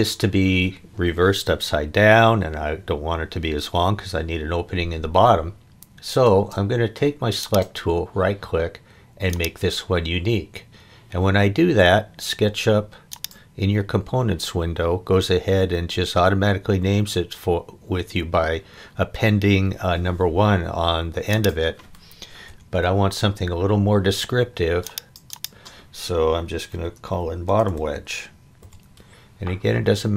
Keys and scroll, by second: 6.2 space, 22.5 BackSpace, 26.5-28.6 typing.